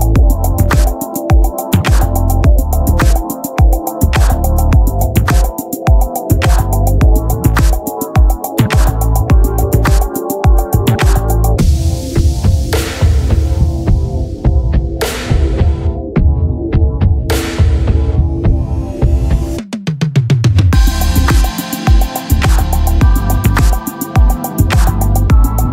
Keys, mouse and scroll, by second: 0.2 Tab, 0.4 a, 0.5 a, 1.2 ctrl+n, 3.3 Tab, 4.3 Tab, 4.7 a, 4.8 a, 5.7-6.9 drag, 6.7 s, 8.4 Tab, 10.3 KP_3, 11.6-19.2 drag, 20.8 s, 22.5 KP_3, 23.3 s, 24.7-25.7 drag.